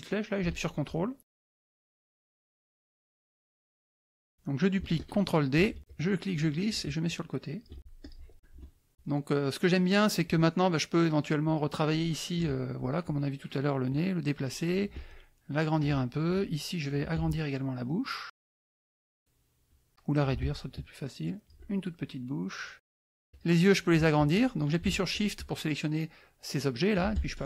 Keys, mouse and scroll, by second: 0.0-1.7 drag, 2.5 ctrl+click, 3.3 click, 3.9 KP_Add, 3.9 middle click, 3.9 scroll, 5.5 ctrl+d, 5.8-7.8 drag, 8.0 ctrl+click, 8.3 KP_Add, 9.0 middle click, 11.4 click, 12.4 KP_Add, 13.9 click, 15.0 ctrl+click, 16.3 ctrl+click, 17.3-18.5 ctrl+shift+drag, 18.8-19.9 ctrl+shift+drag, 20.5-21.7 ctrl+shift+drag, 21.9 ctrl+shift+click, 23.3 click, 25.1 shift+click, 27.2 ctrl+shift+click.